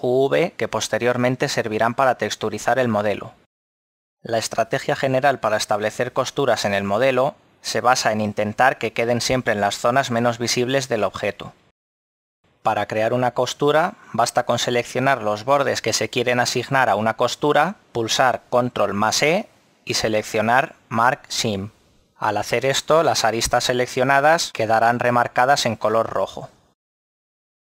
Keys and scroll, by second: 4.6 Tab, 15.4 z, 18.9 e, 22.1 a, 26.4 z.